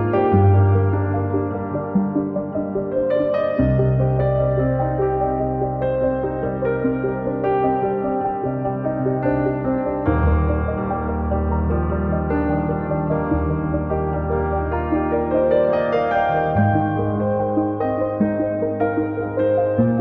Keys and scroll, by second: 1.1 space, 2.7 a, 5.1 Escape, 9.9 space, 10.6 Delete, 11.8 Delete, 16.9 space, 18.4 p, 19.3 space.